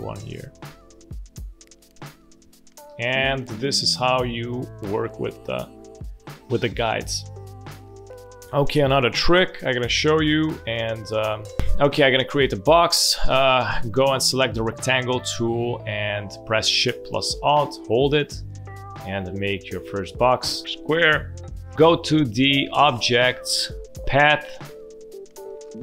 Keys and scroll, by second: 2.8 space, 4.1 space, 7.0 space, 9.6 space, 10.4 space, 11.2 space, 20.4 v.